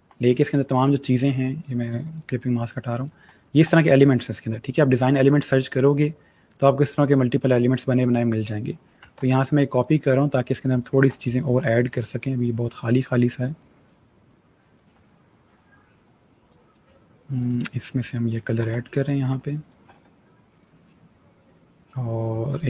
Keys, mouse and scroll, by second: 0.3 right click, 1.7 click, 3.1-3.5 alt+scroll down 2, 3.8 click, 8.9 ctrl+c, 9.6 click, 10.8 ctrl+v, 11.3 ctrl+g, 12.6 click, 18.4 v, 18.6 click, 19.2 space, 19.3 click, 22.3 click.